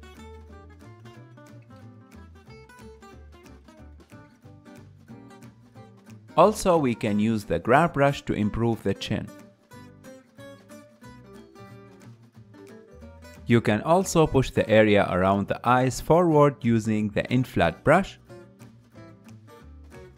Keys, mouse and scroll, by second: 0.5 KP_3, 1.4-2.4 ctrl+middle drag, 2.4-3.7 drag, 3.7-5.8 middle drag, 5.8 KP_3, 7.7 click, 8.2 f, 9.2-11.0 drag, 11.0 f, 11.3 click, 13.1-14.6 ctrl+shift+middle drag, 14.6-16.3 drag, 16.3 f, 17.2-20.1 drag.